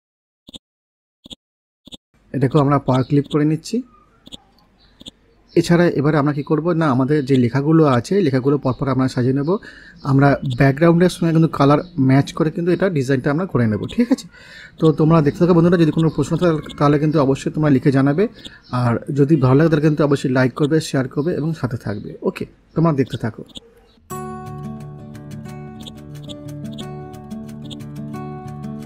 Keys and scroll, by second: 16.1 c.